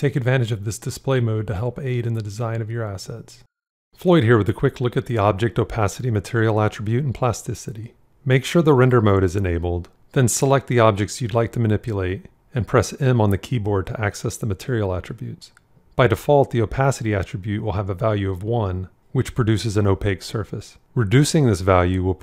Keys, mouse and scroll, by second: 12.9 m.